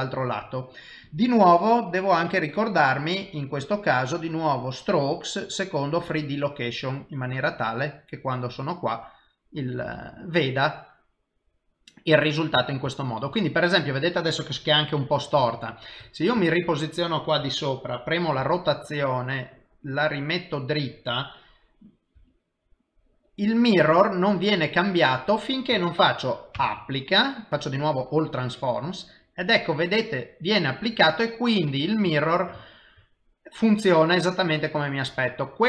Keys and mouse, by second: 1.0 click, 2.2 middle click, 4.2 click, 5.1 click, 6.5 middle click, 12.9 shift+middle click, 13.4 middle click, 15.4 KP_7, 16.5 shift+middle click, 18.4 r, 22.2 g, 26.6 ctrl+a, 30.6 middle click, 31.7 middle click, 32.2 ctrl+middle click, 32.6 shift+middle click, 33.0 middle click.